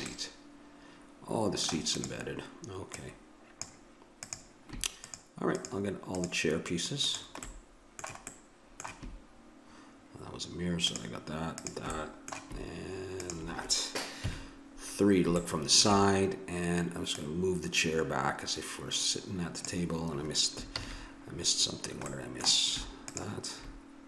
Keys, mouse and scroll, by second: 0.1 middle click, 1.9-3.6 drag, 7.4-10.9 middle drag, 11.9-14.2 middle drag, 14.2 KP_3, 17.2-19.0 drag, 20.7 ctrl+z, 22.1 middle click, 23.1 right click.